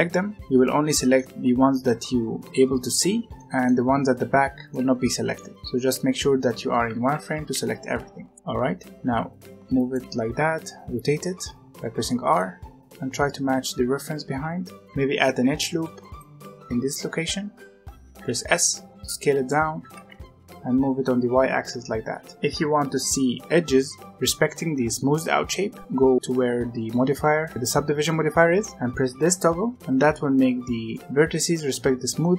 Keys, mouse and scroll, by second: 0.5-2.5 middle drag, 3.3-5.5 middle drag, 5.5-6.1 scroll up 1, 6.1-6.4 scroll down 2, 6.4 z, 7.1 alt+a, 7.3 right click, 7.5 b, 8.0 right click, 8.4-8.9 scroll up 1, 8.8 right click, 8.9 g, 9.2-10.2 right drag, 10.2 r, 11.3 middle click, 12.6 g, 13.0-14.2 right drag, 14.8 alt+a, 15.3 ctrl+r, 18.1 s, 19.7 g, 22.3-23.4 middle drag, 23.4 z, 29.8 click, 30.8-32.3 middle drag.